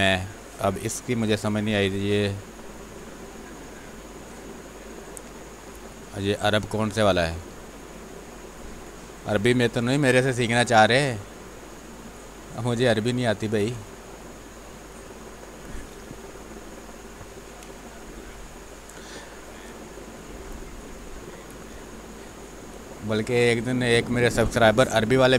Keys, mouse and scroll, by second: 0.6 b, 3.0-5.6 drag, 5.6 space, 5.8 click, 6.1 space, 6.9-11.0 drag, 11.0 space, 11.3 click, 11.5 space, 12.0 click, 12.1 space, 13.5 space, 13.8 alt+click, 14.8 click, 15.9 r, 16.2-19.0 drag, 19.3-21.4 drag, 21.4 space, 23.0 click, 23.8 space, 24.6 r.